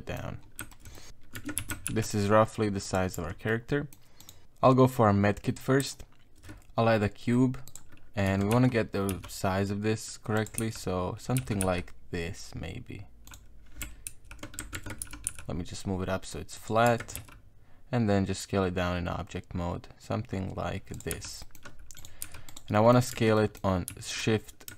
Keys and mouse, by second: 0.1 middle click, 0.7 shift+middle click, 1.0 middle click, 1.4 Tab, 1.6 s, 3.2 Tab, 3.5 middle click, 4.2 right click, 4.4 middle click, 4.6 middle click, 6.5 shift+a, 8.3 Tab, 8.5 KP_1, 9.1 s, 10.6 z, 11.4 g, 14.1 ctrl+z, 14.7 shift+Tab, 15.0 g, 16.9 Tab, 17.2 s, 21.1 z, 21.4 middle click, 22.0 right click, 22.2 h, 22.5 right click, 22.7 middle click, 23.1 Tab, 23.4 middle click, 23.9 s.